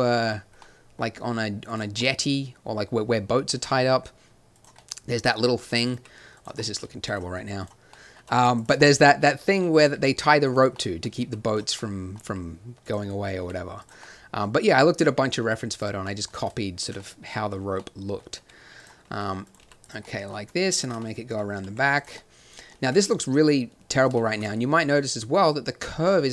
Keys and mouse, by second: 0.2 middle click, 1.6 click, 2.4-3.6 middle drag, 3.6 g, 5.8-8.1 middle drag, 5.9 g, 8.5-9.6 drag, 8.5-9.6 right drag, 9.8 g, 11.2 g, 12.2 r, 13.4 g, 15.4 g, 16.7-17.9 drag, 18.3 g, 19.0 r, 19.6 g, 20.7 click, 21.6 r, 22.8 Tab.